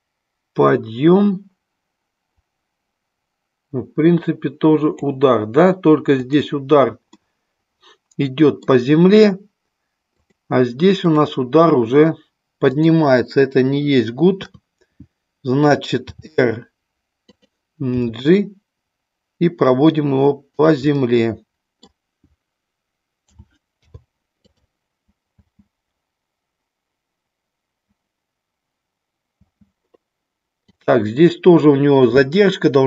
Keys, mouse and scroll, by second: 6.2 click, 7.2-8.6 middle drag, 10.1 click, 11.0 click, 12.7 click, 14.3 KP_3, 16.1 r, 17.8 g, 20.9 middle click, 23.2 a, 23.7 i, 25.3 space, 29.3 space, 30.7 click.